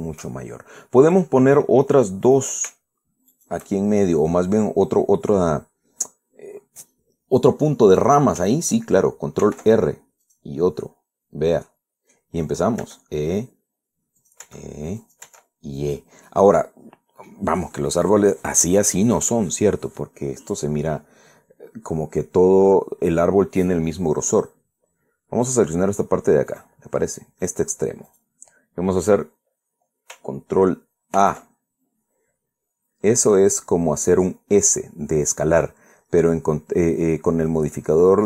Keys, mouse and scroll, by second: 0.6 shift+middle click, 1.1-1.4 shift+scroll up 1, 3.0 right click, 4.0 shift+right click, 10.1 ctrl+r, 10.9 click, 12.3 middle click, 12.9-13.5 scroll up 1, 13.5 e, 14.9 click, 15.1 e, 15.7 click, 16.0 e, 16.5 click, 17.0-18.2 middle drag, 18.6-23.6 middle drag, 27.2 right click, 28.1 right click, 28.8 right click, 31.9 ctrl+a, 35.4 click.